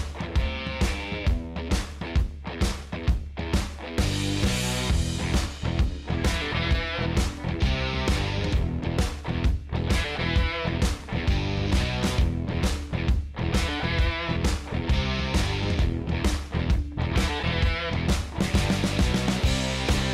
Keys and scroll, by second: 11.5 space, 14.6 space.